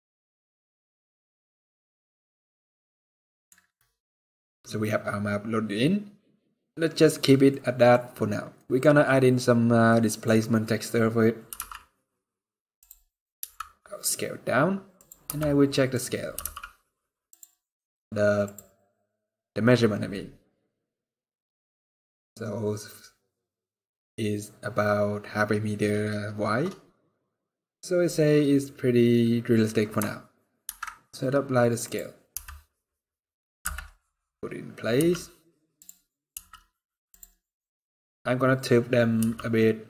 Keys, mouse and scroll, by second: 0.8-1.4 scroll down 11, 1.5-2.0 scroll up 9, 2.6 middle click, 3.3 scroll down 1, 3.6 scroll up 1, 3.7 scroll down 2, 4.1 middle click, 7.0 scroll down 2, 7.2 middle click, 7.7 scroll up 2, 8.2 middle click, 9.6 middle click, 11.1 r, 12.7 scroll up 4, 13.1 s, 15.0 n, 15.4 middle click, 15.7 scroll up 3, 16.0 g, 18.1 click, 19.8 middle click, 20.5-21.1 scroll down 2, 28.0 scroll up 1, 29.6-30.3 scroll up 2, 30.3 ctrl+a, 32.0 n, 32.2 scroll down 2, 33.3 scroll down 3, 33.3 KP_7, 34.1-34.6 scroll down 1, 34.6 g, 36.0 r, 38.8 g.